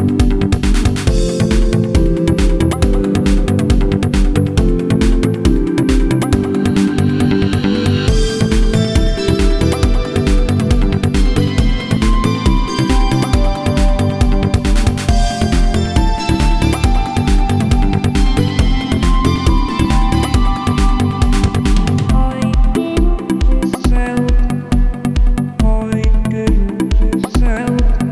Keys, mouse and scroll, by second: 0.0-18.4 drag, 19.2 click, 20.2 click, 21.1-24.6 drag, 24.9-28.1 drag.